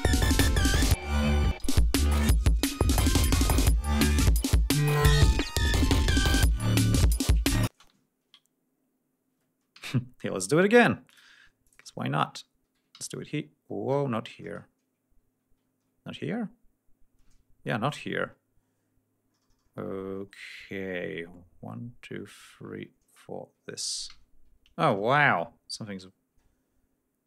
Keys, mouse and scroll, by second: 2.1 ctrl+scroll down 2, 4.2 ctrl+scroll up 2, 7.7 space, 8.0 ctrl+scroll up 2, 9.7 ctrl+v, 11.1 click, 11.6 ctrl+click, 12.9 ctrl+v, 15.7 ctrl+scroll down 2, 17.2 ctrl+y, 20.1 ctrl+scroll down 2, 24.1 ctrl+v, 24.9 ctrl+y, 26.0 ctrl+scroll up 2.